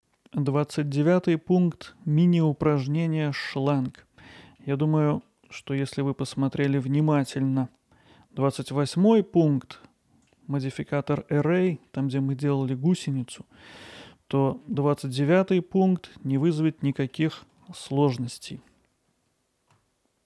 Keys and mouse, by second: 1.2-1.9 middle drag, 2.7-3.8 alt+middle drag, 4.3 middle drag, 5.1 middle click, 5.5 Tab, 6.0 alt+middle click, 7.2 middle click, 8.8-10.3 middle drag, 11.6 middle click, 14.6 middle click, 18.6 middle click, 19.4 ctrl+KP_Add, 20.2 s.